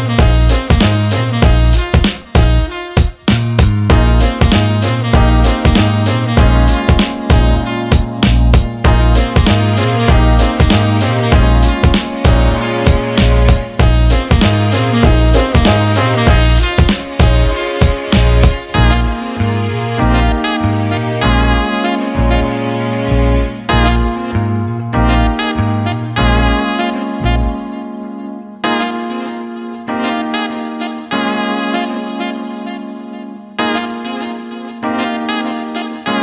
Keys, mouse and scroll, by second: 4.5 click, 6.6-8.1 right drag, 9.6 click, 10.1 click, 11.4 click, 12.5 shift+d, 14.3 click, 14.6 alt+shift+middle click, 17.7 click, 18.6 click, 19.6 click, 21.0 click, 21.4 alt+shift+middle click, 21.9 alt+shift+middle click, 23.1 click, 24.0 click, 25.4 click, 27.4-28.4 drag, 30.4 Tab, 32.1 alt+middle click, 33.1 click, 34.4 alt+middle click, 34.9 alt+shift+middle click.